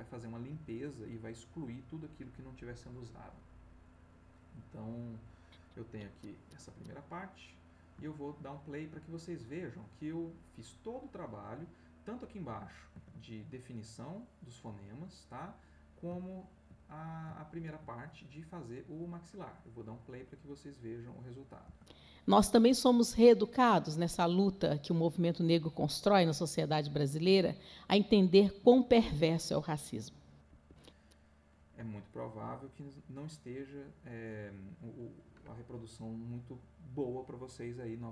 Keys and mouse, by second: 3.9 click, 5.2-6.6 drag, 7.2 middle click, 8.2 ctrl+middle click, 11.5 middle click, 15.5 click, 16.2 ctrl+click, 16.9-17.9 ctrl+drag, 21.6 space, 30.5 Escape.